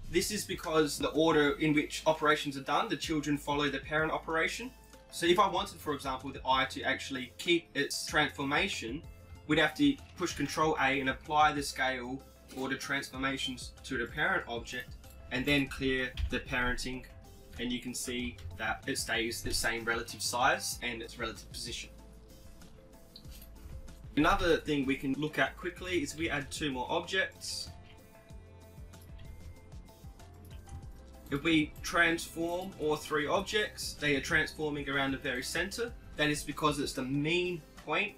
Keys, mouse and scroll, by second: 5.0-6.6 right drag, 10.6 ctrl+a, 15.0-17.6 right drag, 17.0 alt+p, 20.3 alt+p, 24.1-25.3 right drag, 24.6 KP_7, 25.1 shift+a, 26.6 g, 28.1 shift+a, 29.6 g, 31.7-34.7 right drag, 33.6 r.